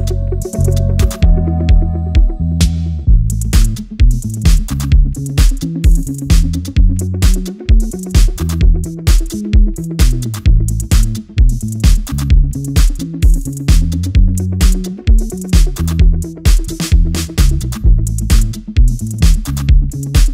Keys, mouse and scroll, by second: 1.6-1.9 alt+scroll down 1, 1.9 alt+scroll up 1, 2.4 click, 2.7 space, 2.8 click, 3.1 space, 3.7-4.3 alt+scroll down 1, 4.3 click, 4.9 alt+scroll down 1, 5.1 alt+scroll up 1, 5.7 click, 6.7 alt+scroll down 1, 6.9 click, 7.4-8.4 alt+scroll down 1, 8.4 alt+click, 9.9 alt+scroll down 1, 10.1-10.8 alt+scroll up 1, 11.0 alt+scroll down 1, 11.4 click, 11.7 space, 14.3 click, 17.7 click, 17.7-20.3 drag.